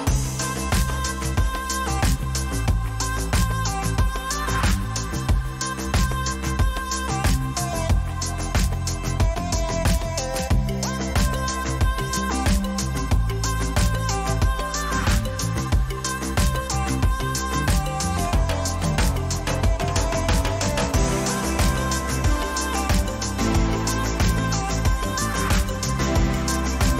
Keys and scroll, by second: 1.8 Down, 2.6 Up, 15.9 Down, 19.5 Up.